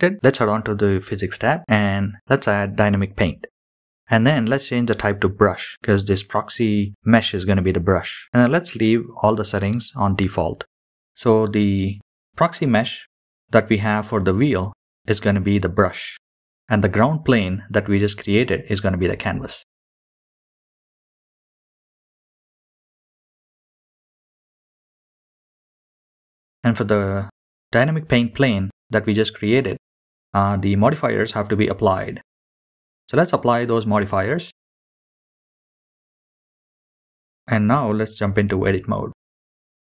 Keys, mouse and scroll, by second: 1.0 click, 2.4-2.9 scroll down 3, 5.0-6.1 drag, 8.9 click, 10.3-13.7 scroll down 2, 13.7-16.2 scroll down 4, 16.2-16.6 scroll up 1, 17.9 click, 18.6 scroll up 3, 18.8 click, 18.9-19.5 scroll down 4, 19.0 drag, 19.2 click, 19.6 middle click, 19.7 click, 20.0 click, 20.4 click, 20.6 click, 20.7 middle click, 21.0 scroll down 1, 21.0 click, 21.1 shift+middle click, 21.4 click, 22.9 scroll down 2, 22.9 KP_7, 22.9 KP_Decimal, 23.2 click, 23.5-24.6 drag, 27.5-28.3 drag, 29.9 click, 33.8-34.7 drag, 35.7-36.5 drag, 38.0-39.0 drag.